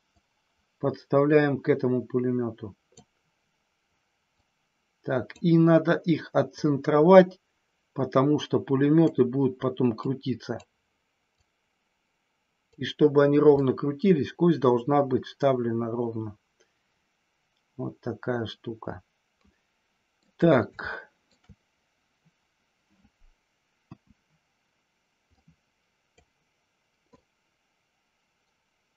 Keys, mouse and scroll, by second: 0.0-3.0 drag, 4.3-5.3 drag, 6.6-9.0 drag, 10.1 click, 11.3-12.6 drag, 13.5-20.3 middle drag, 20.7-21.1 scroll up 1, 21.1 shift+middle click, 23.7 KP_1, 25.4 click, 27.1-28.9 drag.